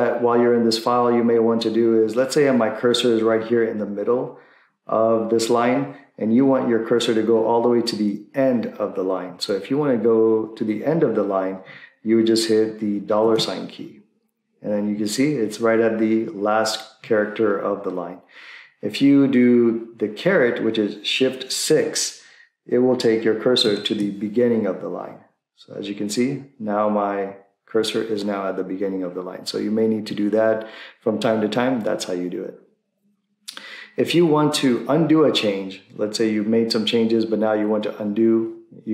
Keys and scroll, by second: 13.3 shift+4, 23.6 shift+6.